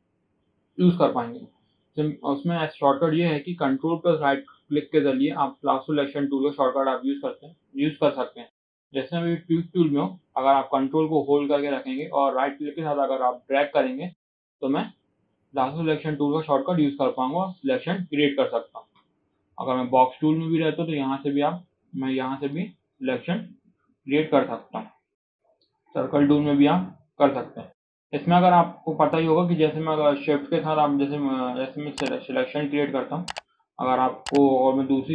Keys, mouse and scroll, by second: 12.0 ctrl+right click, 18.9-20.0 drag, 20.0 ctrl+right click, 20.8 click, 21.1 ctrl+right drag, 23.8-25.1 drag, 25.1 ctrl+right drag, 26.7-27.2 scroll down 1, 27.2 scroll up 4, 27.5 shift+middle click, 27.8 scroll down 2, 28.0 shift+middle drag, 28.3-30.9 drag, 30.9-31.3 right drag, 31.7 ctrl+right click, 33.5-34.2 shift+middle drag, 34.2-35.1 ctrl+right drag.